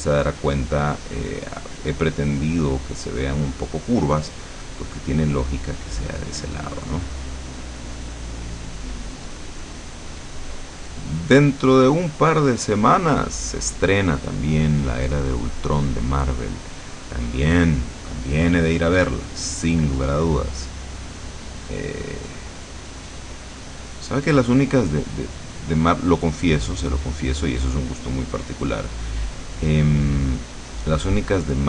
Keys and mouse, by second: 1.7-4.1 drag, 5.1-12.7 drag, 13.2-14.7 drag, 15.3-16.9 drag, 17.1 click, 20.3-28.9 drag, 29.6-31.6 drag.